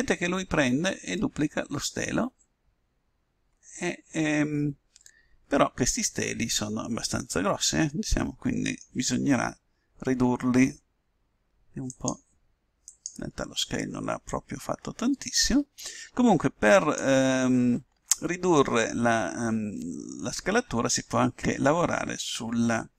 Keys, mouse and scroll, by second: 0.2-2.8 middle drag, 11.9-15.9 drag.